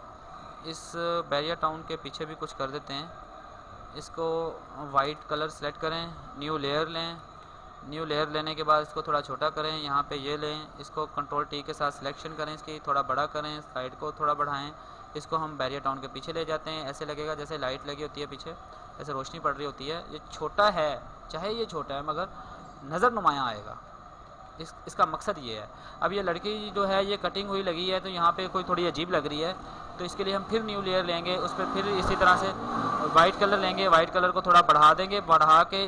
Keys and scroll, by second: 1.6 ctrl+z, 6.6 ctrl+shift+n, 10.4 ctrl+t, 24.0 alt+space, 29.1 ctrl+shift+n, 32.4 ctrl+t.